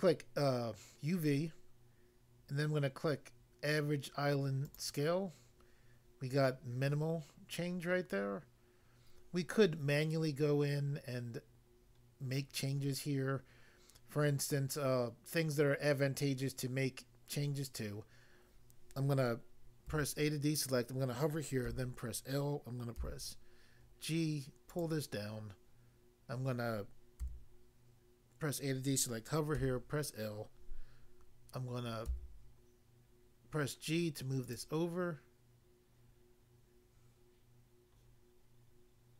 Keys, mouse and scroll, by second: 4.6 click, 19.8 a, 21.6 l, 22.9 g, 24.7 click, 27.2 a, 29.6 l, 32.0 g, 34.4 click.